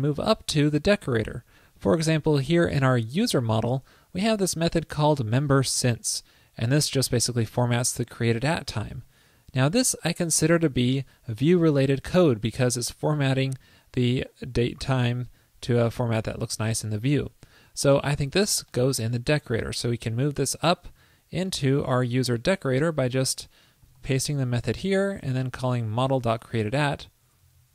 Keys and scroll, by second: 20.4 super+x, 21.0 super+s, 24.0 super+v, 26.0 alt+Right.